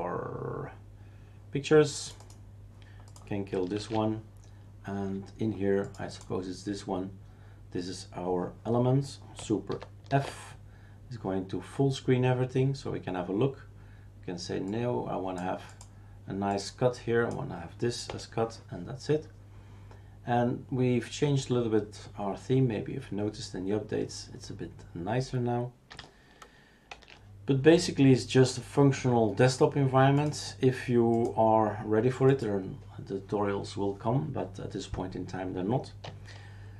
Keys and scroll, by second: 3.8 shift+super+q, 9.7 super+d, 10.1 super+f, 11.1 Print, 18.1 Return, 26.9 shift+super+q.